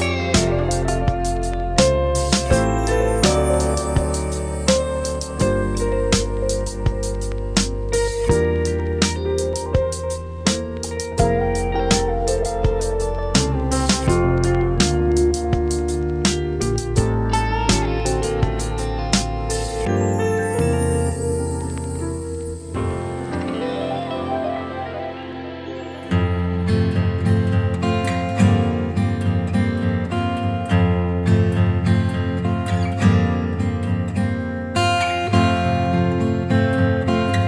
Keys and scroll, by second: 2.6 super+z, 5.0 b, 6.3 ], 8.6 super+z, 8.9 super+x, 9.6 x, 18.5 [, 21.6 ], 25.0 ], 27.3 [, 28.8 [, 32.9 ], 35.1 5, 35.6 [.